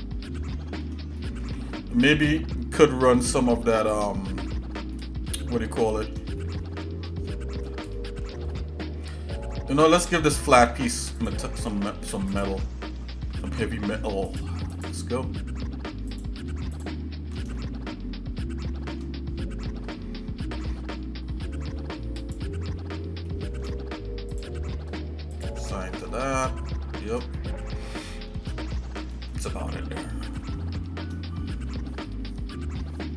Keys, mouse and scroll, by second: 1.2 middle click, 1.7 shift+middle click, 3.3 shift+middle click, 4.9 shift+middle click, 6.0 middle click, 6.4 shift+middle click, 7.3 middle click, 8.0 shift+middle click, 8.5 middle click, 9.2-9.6 scroll up 2, 10.5-10.9 scroll up 2, 11.2 click, 11.6 Tab, 12.3 click, 13.4 ctrl+Tab, 14.8 click, 16.1 alt+shift+click, 16.7 alt+shift+click, 17.6-18.9 shift+middle drag, 19.9 scroll up 1, 22.2 shift+click, 23.3 shift+middle click, 24.3 click, 25.7 click, 26.1 shift+middle click, 27.3 middle click, 27.9 shift+middle click, 28.9 Tab, 29.3 middle click, 29.6 scroll down 1, 30.1 scroll down 1, 30.4 shift+middle click.